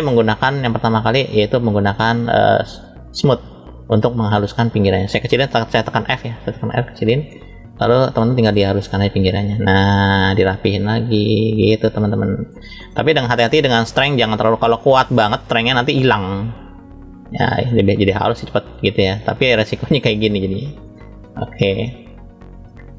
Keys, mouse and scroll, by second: 0.5 scroll down 1, 1.1 middle click, 8.7 click, 8.7 scroll up 1, 12.8 middle click, 14.2 click, 16.1 click, 18.8 middle click, 20.8 click, 22.2 scroll down 1, 22.5 middle click.